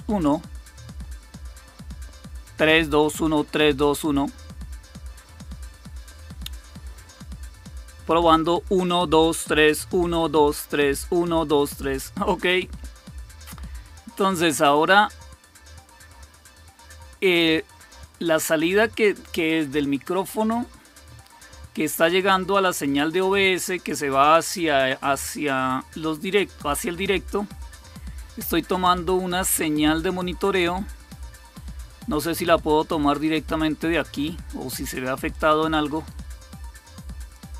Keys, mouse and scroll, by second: 35.2 click, 36.1 right click, 37.1 click.